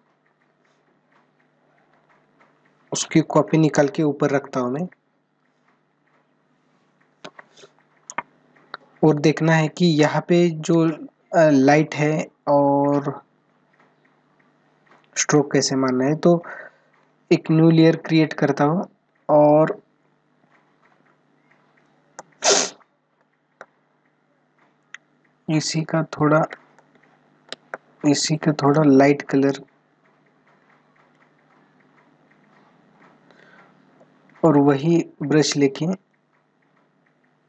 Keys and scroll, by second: 20.9 ctrl+-, 21.9 space, 26.5 space.